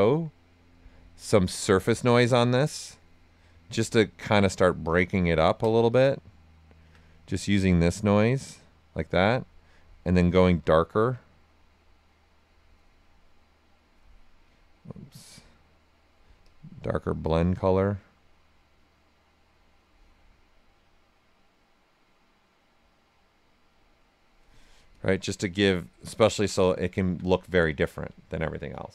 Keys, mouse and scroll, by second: 1.5 typing, 3.6 right click, 4.9 ctrl+right click, 5.6 ctrl+alt+right click, 6.2 alt+right click, 7.4-24.9 drag, 24.4 typing, 26.0 ctrl+right click, 28.1 alt+right click, 28.7 right click.